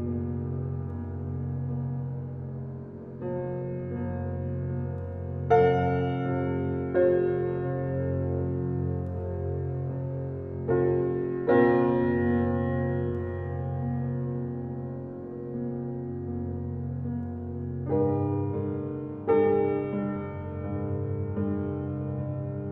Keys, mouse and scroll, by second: 4.1 click, 11.2 click, 18.1 click.